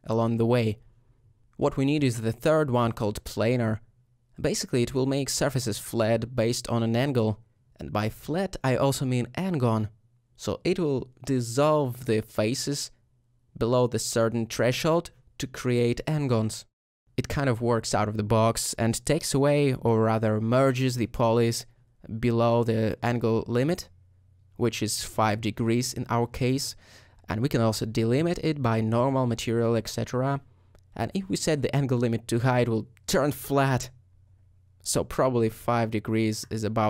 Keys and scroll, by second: 21.7 ;, 33.5 5.